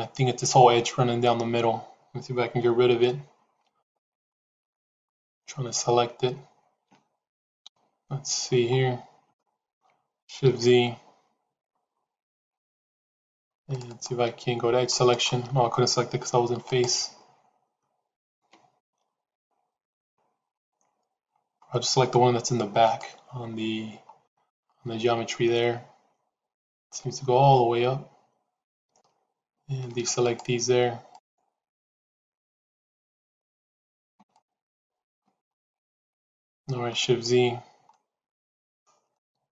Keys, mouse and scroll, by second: 3.7 alt+click, 4.6 alt+click, 7.6 ctrl+KP_1, 9.2 shift+middle click, 12.2 shift+z, 13.6 click, 13.8 click, 15.0 click, 18.1 alt+click, 19.4-20.5 drag, 22.7 alt+click, 24.4-26.6 middle drag, 27.5-29.8 middle drag, 30.1 shift+click, 31.0 shift+click, 33.9 c, 36.0 middle click, 37.8 shift+z, 37.9 middle click, 39.0-39.5 middle drag.